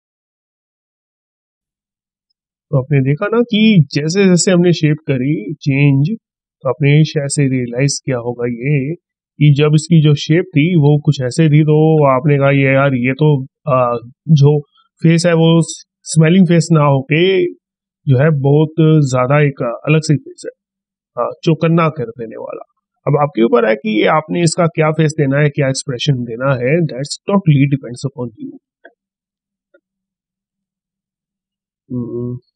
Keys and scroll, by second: 10.6 ctrl+z, 25.1 ctrl+shift+z.